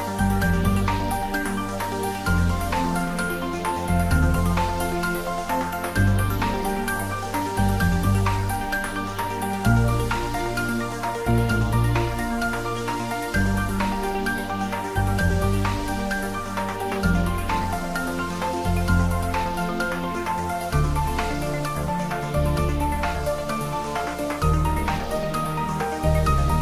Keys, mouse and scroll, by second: 7.2 space, 9.9-12.9 drag, 12.9 scroll up 1, 15.1-17.0 drag, 18.0-18.9 typing, 19.9 Down.